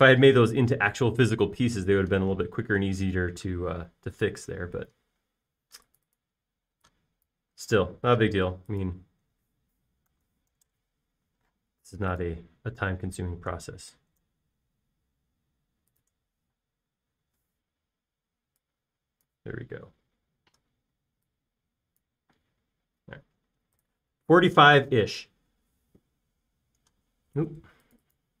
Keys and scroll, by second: 8.9 m, 10.9-12.3 typing, 17.4 p, 18.7 Escape, 20.8-21.3 typing, 23.3 space.